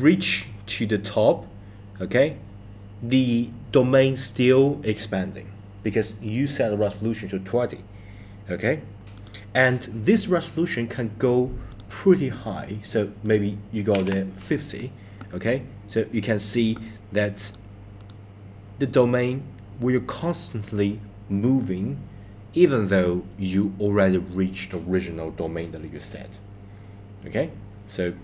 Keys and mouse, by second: 9.2 click, 11.7 click, 13.3-17.6 drag, 18.0 click.